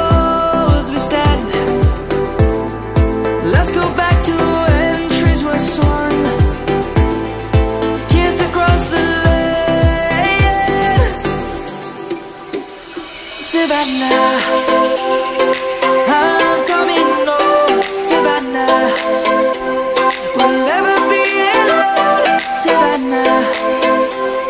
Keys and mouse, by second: 1.1 middle click, 1.6 Tab, 2.1 click, 2.7 middle click, 3.6 middle click, 4.2 click, 6.5 s, 9.6 ctrl+z, 10.5 middle click, 12.8 click, 13.0 right click, 13.6 click, 13.7 click, 14.4 middle click, 17.0 click, 17.5 right click, 18.1 click, 19.2 shift+middle click, 19.8 click, 20.5 Tab, 21.4 click, 22.6 ctrl++.